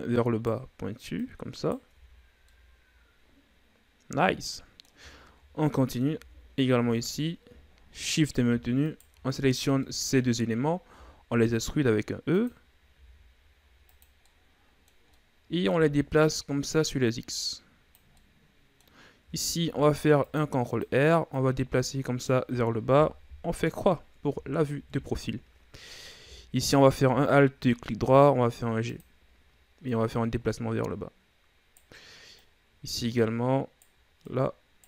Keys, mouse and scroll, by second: 1.2 right click, 1.9 Tab, 2.2-2.5 scroll down 2, 2.5-5.1 middle drag, 5.1-5.7 ctrl+scroll up 4, 5.7 middle click, 6.2 Tab, 6.9 right click, 7.7-8.0 ctrl+scroll up 2, 8.0 middle click, 8.8 shift+right click, 9.5-9.8 shift+scroll down 3, 9.8-10.9 middle drag, 10.9 e, 12.9 s, 14.2-16.0 middle drag, 16.0-16.7 ctrl+scroll down 2, 16.7-18.2 drag, 18.2-19.7 middle drag, 19.7 ctrl+r, 21.3-23.3 right drag, 23.3 KP_3, 24.6-25.0 shift+scroll up 3, 25.5-26.8 scroll up 1, 26.8 alt+right click, 27.9 g, 29.2-29.9 scroll up 2, 29.9 right click, 32.4-34.3 right drag.